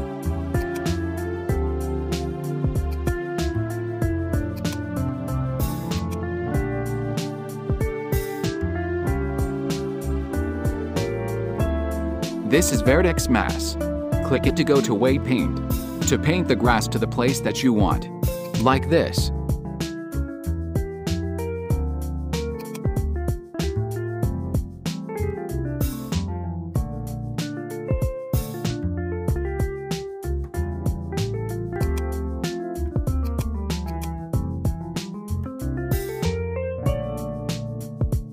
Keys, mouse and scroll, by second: 0.6-3.1 drag, 4.7-6.0 drag, 7.8-12.9 middle drag, 12.9 click, 14.8-17.3 drag, 18.5-21.2 drag, 22.8-25.5 drag, 28.5 f, 33.4-36.7 drag.